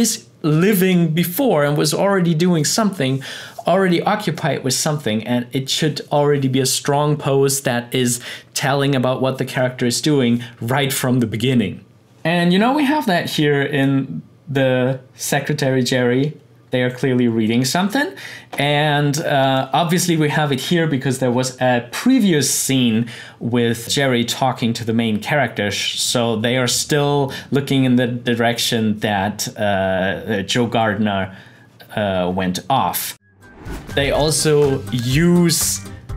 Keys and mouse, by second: 11.8-22.2 drag.